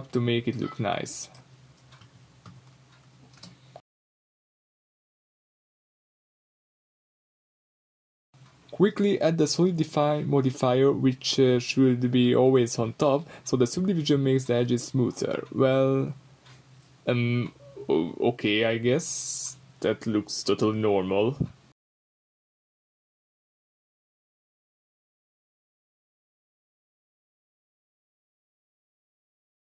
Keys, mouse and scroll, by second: 3.2 middle click, 3.7-10.0 drag, 10.0-10.9 middle drag, 10.9-11.3 drag, 11.3 scroll up 2, 11.5 click, 11.8-14.9 drag, 12.8-13.9 scroll down 2, 14.6-14.9 scroll up 2, 15.1 middle click, 16.0 click, 16.6-21.9 middle drag, 21.9-23.9 drag, 23.9-26.7 middle drag, 25.3-26.7 scroll up 2, 26.7 click, 27.3-29.8 middle drag.